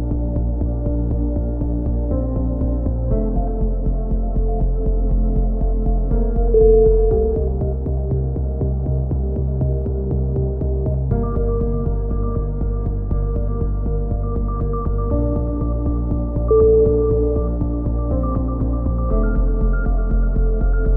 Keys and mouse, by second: 1.7 KP_3, 2.0 z, 3.1-6.9 middle drag, 6.9 click, 10.6 KP_3, 10.7 click, 10.8 middle click.